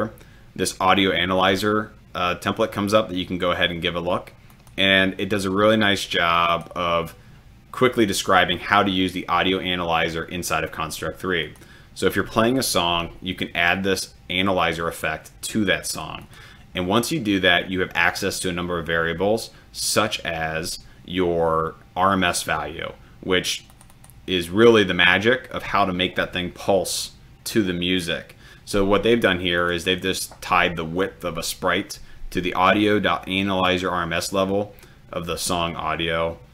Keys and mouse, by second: 16.2-16.6 drag, 23.8 click, 29.7 click.